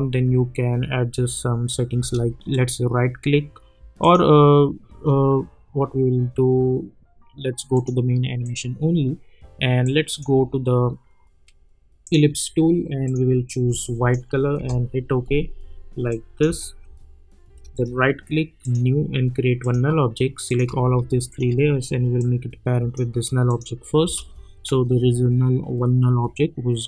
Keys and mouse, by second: 1.9 space, 2.5 right click, 4.0 click, 7.7-12.0 drag, 14.5 Return, 16.1 click, 16.4 space, 17.7 right click, 18.6 click, 21.3 shift+click, 22.5 click, 24.0 space.